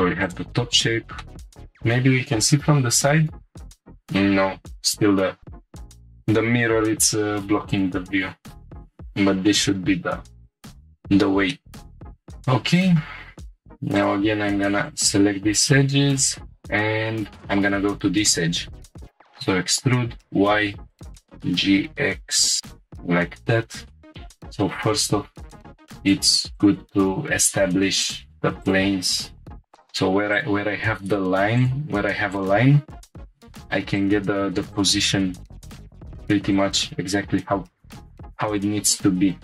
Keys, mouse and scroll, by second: 0.2 click, 1.2 shift+middle click, 1.8-2.4 scroll up 3, 3.5 scroll down 3, 3.6 scroll up 1, 3.8 scroll down 2, 7.7 click, 8.5-8.9 scroll down 4, 8.7 middle click, 10.4 click, 11.2 scroll down 2, 11.5 middle click, 12.0-12.4 scroll up 6, 13.4 2, 13.9 click, 14.8 ctrl+click, 16.1 click, 16.9 scroll down 1, 18.8 e, 19.2 y, 20.9 click, 21.2 g, 21.2 x, 22.4-23.6 drag, 24.1 1, 24.1 g, 26.0 click, 26.8 g, 28.0 click, 28.8 g, 29.8 click, 30.6 g, 31.6 click, 32.5 g, 33.2 click, 33.3 g, 34.0-35.0 drag, 35.0 g, 35.5 click, 35.9 g, 36.5-38.2 drag, 38.2 1, 38.5 click.